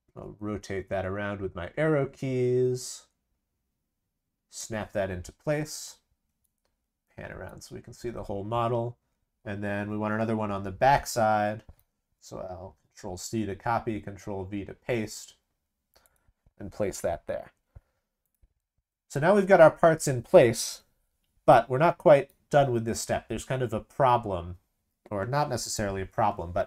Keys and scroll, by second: 12.7 ctrl+c, 13.6 ctrl+v.